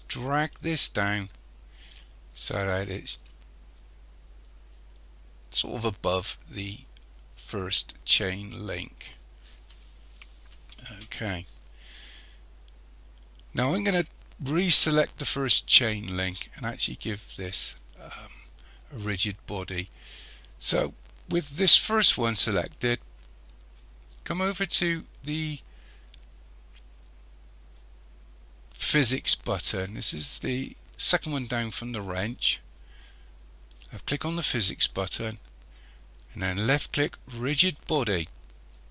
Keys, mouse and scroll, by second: 3.7-4.8 scroll up 3, 10.2-11.0 scroll down 2, 11.0 scroll down 1, 15.4 click, 34.0 click, 37.5 click.